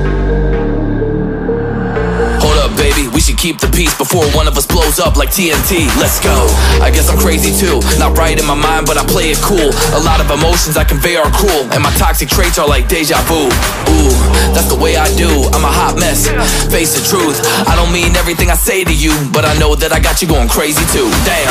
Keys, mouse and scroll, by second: 0.0-2.4 typing, 3.3 alt+scroll down 1, 3.3 alt+scroll up 1, 4.0 ctrl+z, 4.8 ctrl+z, 8.9 ctrl+z, 9.5 alt+scroll up 1, 9.7 alt+scroll down 1, 10.2 alt+scroll up 1, 11.0 alt+scroll down 1, 11.1 alt+scroll up 1, 14.7 double click, 15.2 scroll down 1, 15.5 double click.